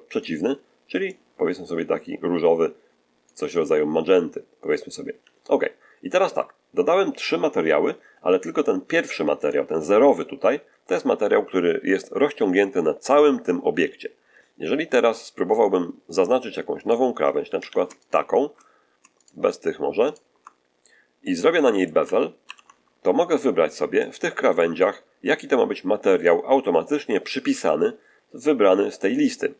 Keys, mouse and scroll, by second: 0.0 click, 1.0-3.3 drag, 9.3 click, 16.7 right click, 17.5 a, 17.9 alt+shift+right click, 19.1 alt+shift+right click, 20.0 shift+right click, 21.1 middle click, 22.3 ctrl+b, 23.9 click, 24.4 middle click.